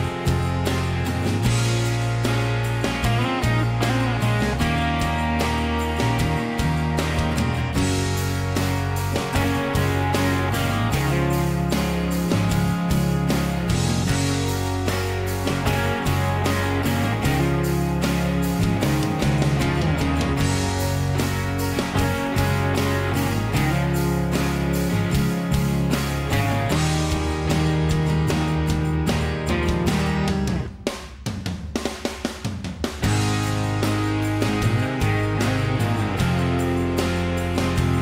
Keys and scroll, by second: 1.7 ctrl+a, 2.1 m, 3.1 m, 5.2 Escape, 5.6-7.4 typing, 20.3 l, 21.5 Escape, 21.8 ctrl+a, 22.2 Escape, 22.8 ctrl+a, 25.8 p, 27.1 Escape, 27.8 Escape, 27.9 Escape, 31.3 p, 37.1 Escape, 37.6 p.